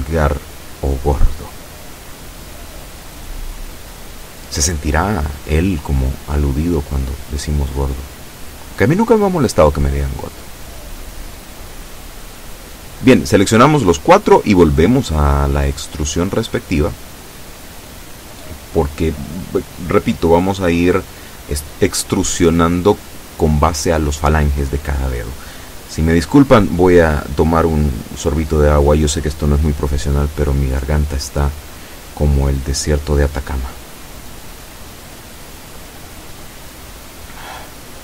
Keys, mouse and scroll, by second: 9.5 b, 10.5-13.4 drag, 18.4 e, 22.6-23.6 drag, 25.4-33.0 drag, 37.0-38.0 drag.